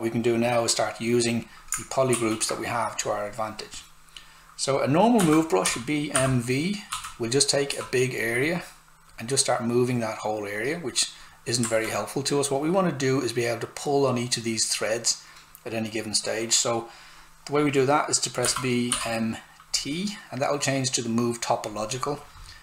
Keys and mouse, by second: 2.1 shift+f, 4.9-7.7 typing, 7.8 click, 11.7 alt+right click, 18.4 b, 18.9 m, 21.6 click.